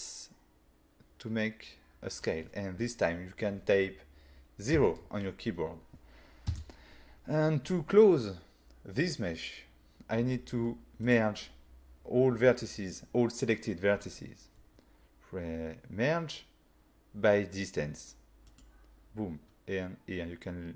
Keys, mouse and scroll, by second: 4.8 0, 6.5 Return, 11.1 click, 18.5 click.